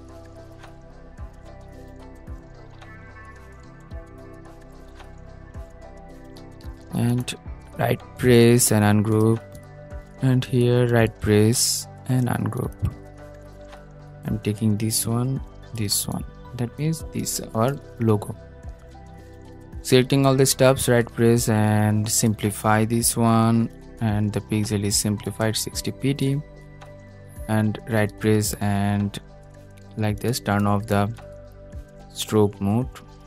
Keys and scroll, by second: 0.0 super+y, 1.5 super+z, 4.2 super+y, 4.8 super+a, 5.2 super+z.